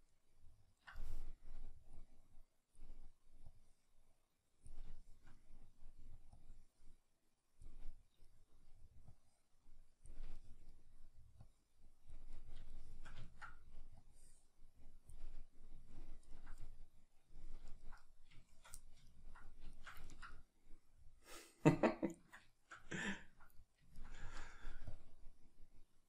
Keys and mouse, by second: 0.1-2.8 middle drag, 2.8-5.0 drag, 5.0-7.6 shift+middle drag, 7.6 click, 7.9-9.8 middle drag, 9.8 click, 10.4-12.1 shift+middle drag, 12.1 click, 12.3-15.1 middle drag, 15.1 click, 15.9-26.0 ctrl+middle drag.